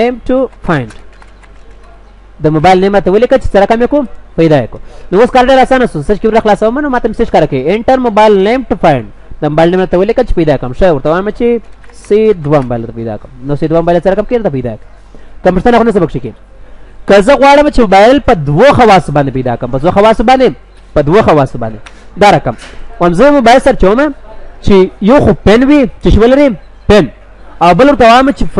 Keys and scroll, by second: 4.5 ctrl+s, 5.2 ctrl+w, 21.3 ctrl+w, 21.9 ctrl+w.